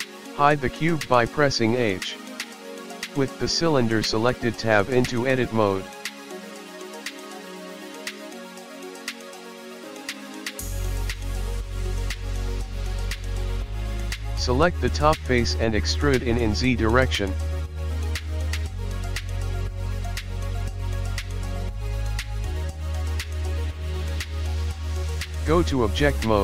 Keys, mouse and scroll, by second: 0.2 g, 1.4 Tab, 2.2 middle click, 2.6 Tab, 2.8 click, 3.1 h, 4.2 click, 5.5-7.6 scroll up 2, 7.6 Tab, 7.6-8.2 scroll up 1, 9.2 click, 10.7 click, 11.2-12.3 scroll down 3, 11.7 middle click, 12.6 KP_1, 13.8 e, 17.5-18.6 scroll down 1, 18.6-18.9 scroll down 1, 22.1 Tab.